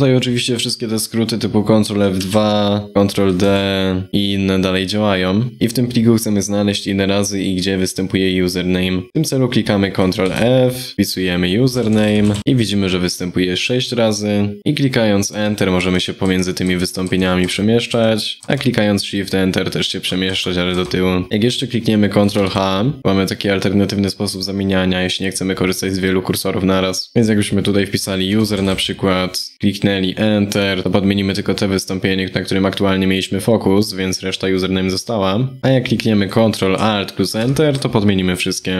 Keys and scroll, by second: 1.9 ctrl+F2, 3.1 ctrl+d, 9.9 ctrl+f, 22.1 ctrl+h.